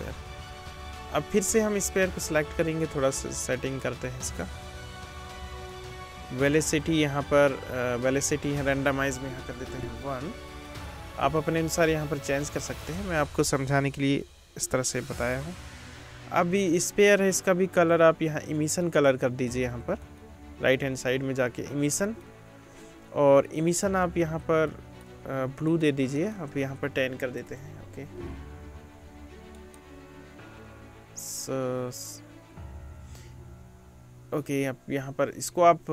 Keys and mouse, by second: 10.9-17.8 drag, 17.8 middle click, 18.0 click, 18.8-23.9 middle drag, 23.9-25.7 drag, 25.7 middle click, 25.8 click, 26.1-29.8 middle drag, 27.5 BackSpace, 29.8-35.9 drag.